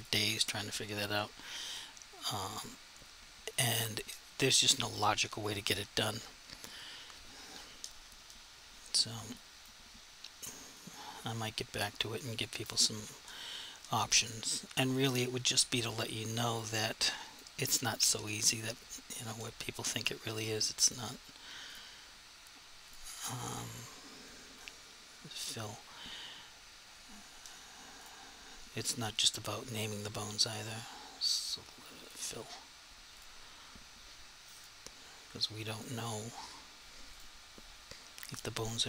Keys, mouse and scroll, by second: 9.5 click, 10.9 click, 16.7 click, 20.9 click, 28.0 click, 32.0 click.